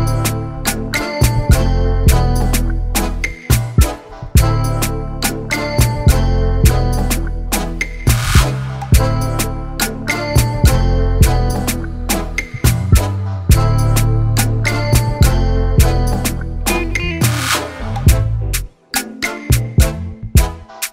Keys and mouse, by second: 0.0 ctrl+y, 0.9 ctrl+t, 2.5 click, 4.2 click, 5.5 Return, 7.2 click, 7.9 space, 9.1 click, 10.0 click, 10.8 Delete, 14.1 click, 15.4 click, 16.8 click, 17.2 click, 19.2 click, 20.6 click.